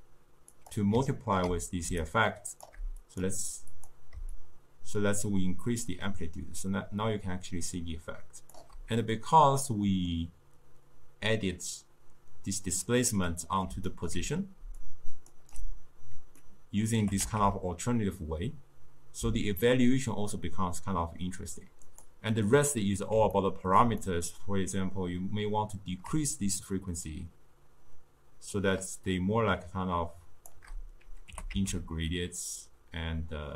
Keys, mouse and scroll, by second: 1.2 ctrl+middle click, 2.1-7.5 shift+drag, 9.2-12.2 middle drag, 13.4-14.7 middle drag, 14.7 d, 14.9-15.4 drag, 15.4 d, 15.5 d, 16.4 scroll down 2, 16.5-17.2 middle drag, 17.2 g, 23.4-25.3 ctrl+middle drag, 25.3-28.4 drag, 31.4 g.